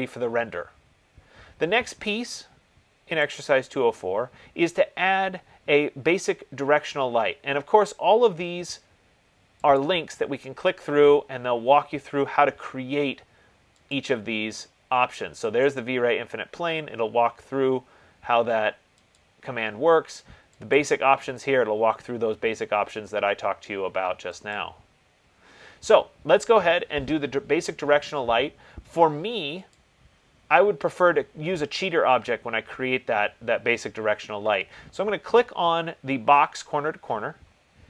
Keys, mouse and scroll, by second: 3.6 click, 10.0 click, 14.2 click, 16.0 click, 19.3 click, 20.9 click, 24.9 click, 33.2 click, 36.9 click.